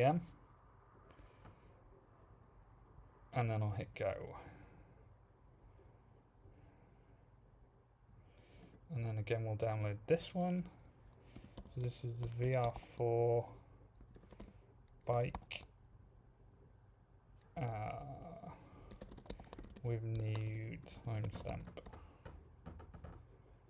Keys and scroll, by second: 0.6-1.3 typing, 11.1-12.7 typing, 13.7-15.3 typing, 18.6-22.3 typing.